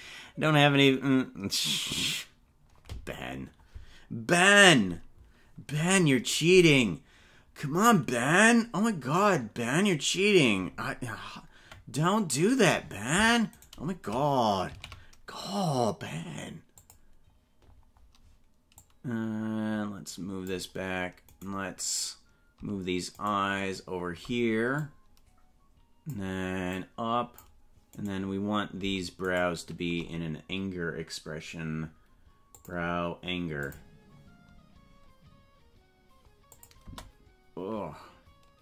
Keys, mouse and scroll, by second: 13.5 right click, 14.6 shift+d, 18.7-20.5 drag, 21.8 right click, 23.7 shift+right click, 24.7-26.1 drag, 26.7 click, 28.4 right click, 29.6 shift+right click, 32.5 click, 33.6 click, 36.6 click, 36.8 space.